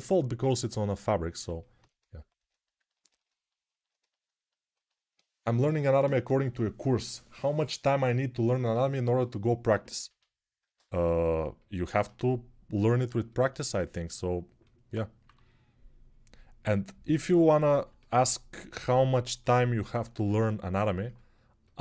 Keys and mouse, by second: 2.4-10.8 ctrl+alt+right drag, 10.8-21.8 alt+shift+drag, 15.0 3.